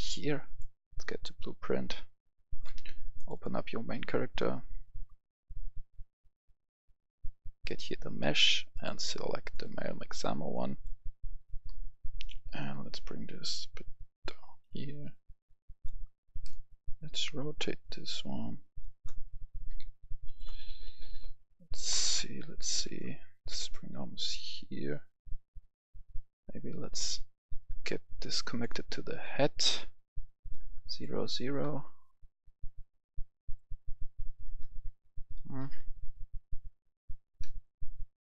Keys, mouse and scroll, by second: 0.4 click, 1.7-2.8 right drag, 1.9 s, 2.3 d, 3.1-16.8 drag, 16.8 space, 17.0-18.8 drag, 19.0 right click, 19.0 a, 19.2 s, 19.7 w, 21.0 click, 21.8 right click, 23.5 click, 30.5 KP_0, 30.8 click, 31.0 KP_0, 31.4 Return, 33.3 click, 34.3-37.8 right drag, 34.8-36.0 typing, 37.8 space.